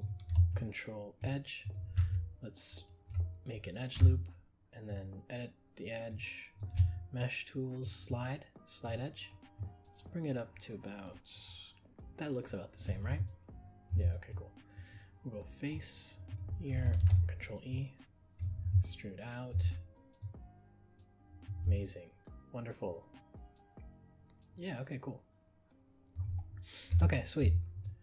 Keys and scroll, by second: 17.0 ctrl+e.